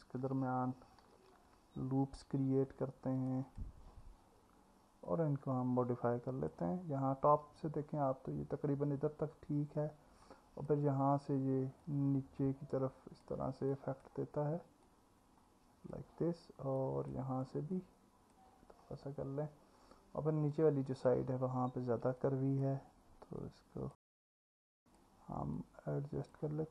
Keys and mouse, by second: 1.1 ctrl+r, 5.1-6.5 drag, 10.3 click, 11.8 click, 13.8 click, 16.8 click, 17.8 click, 20.6 click, 22.2 click, 23.4 click, 24.5 click.